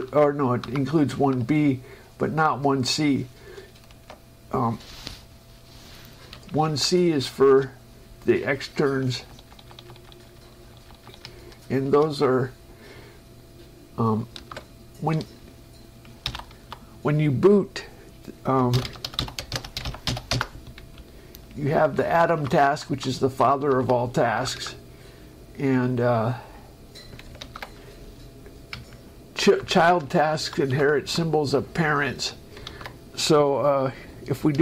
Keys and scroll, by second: 0.0 Down, 0.6 Down, 1.5 shift+Down, 4.3 shift+Escape, 6.9 Up, 7.8 space, 8.9 Page_Down, 12.1 shift+Escape, 14.6 ctrl+Down, 16.5 alt+m, 19.5 k, 19.9 shift+p, 20.6 Return, 21.3 Up, 22.9 Right, 24.6 Down, 29.0 Up, 30.6 Right, 31.0 Up, 31.3 Right, 33.0 ctrl+Down.